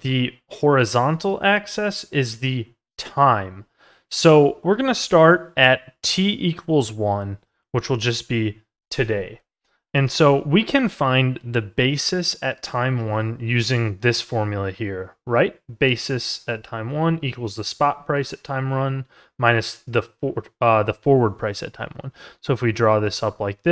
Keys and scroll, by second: 4.4 ctrl+z.